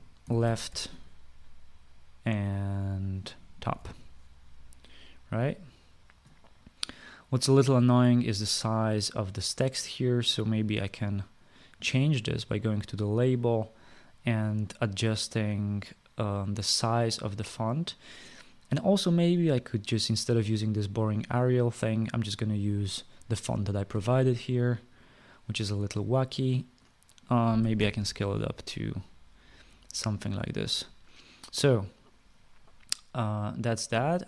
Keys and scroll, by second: 0.7-1.8 typing, 4.1-4.8 typing, 13.4 typing, 28.1-28.9 typing.